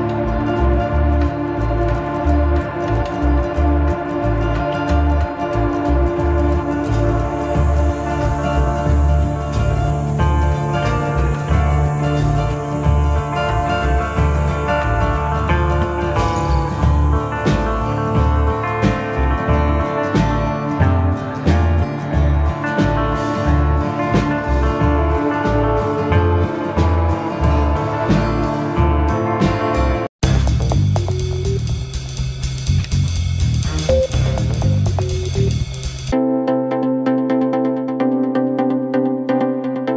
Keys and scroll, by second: 0.5 g, 3.8 g, 24.7 F9.